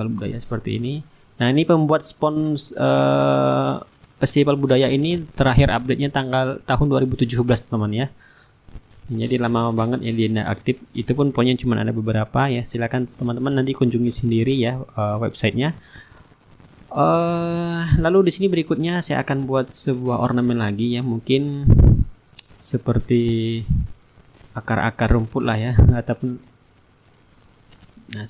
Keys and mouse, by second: 1.2 click, 2.3-6.3 ctrl+drag, 6.4-8.1 drag, 13.2 click, 19.5-20.7 middle drag, 24.9-27.9 drag.